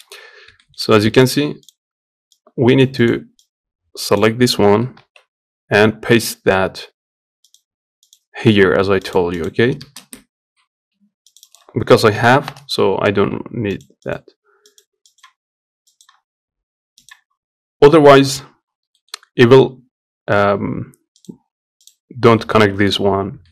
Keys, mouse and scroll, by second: 8.0 middle click, 8.0-15.1 drag, 18.0-23.5 drag.